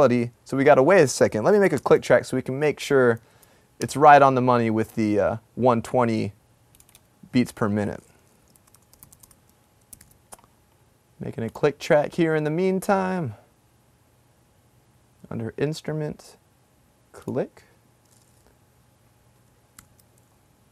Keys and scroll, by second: 2.0 shift+super+n, 3.4 super+Down, 8.8-10.0 typing, 20.0 super+=.